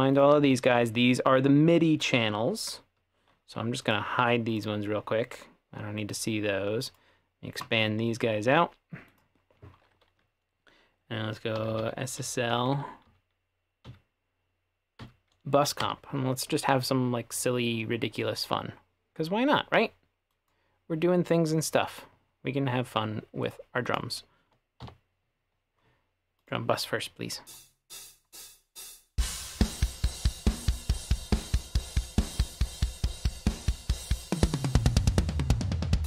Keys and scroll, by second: 11.6-12.4 typing, 12.6 Down, 12.7 Down, 13.1 Down, 13.9 Down, 15.1 Up, 15.9 Return, 24.9 /, 27.5 space.